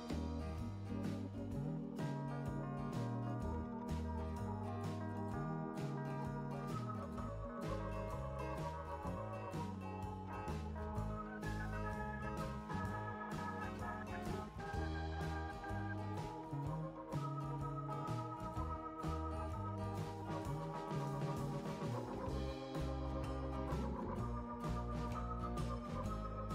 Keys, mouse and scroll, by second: 0.5-1.2 scroll up 3, 2.8 click, 9.1 click, 11.2 click, 11.4 click, 15.1-16.5 drag, 17.8 click, 22.8 click, 23.8-24.3 scroll down 2, 26.4 click.